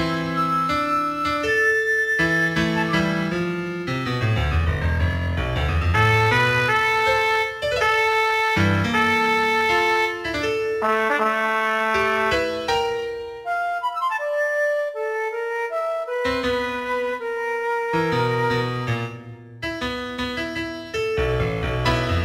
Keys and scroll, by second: 0.0-3.3 typing, 5.4 g, 6.0 g, 6.9 g, 8.1 g, 9.6 g, 10.3 g, 10.7 g, 11.4 g, 12.4 g, 13.3 g, 15.3 g, 16.5 g, 17.2 g, 17.9 g, 19.5 g, 20.1 g, 21.3 g.